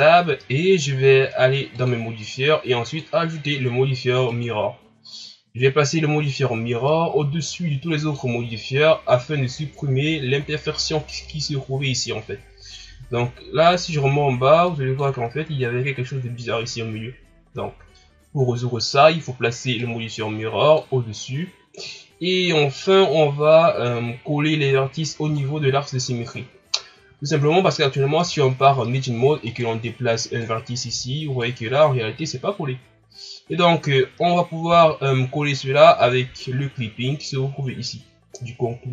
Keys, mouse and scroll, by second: 1.7-2.9 drag, 4.4-5.9 drag, 6.9-8.1 drag, 13.7-15.0 drag, 16.9-17.2 ctrl+scroll up 1, 19.8-20.7 drag, 22.9-25.4 drag, 25.4 shift+scroll down 2, 26.2 scroll up 1, 28.2 Tab, 29.4 right click, 30.4-31.7 drag, 31.7-33.2 scroll up 1, 34.7 ctrl+z, 36.0 Tab.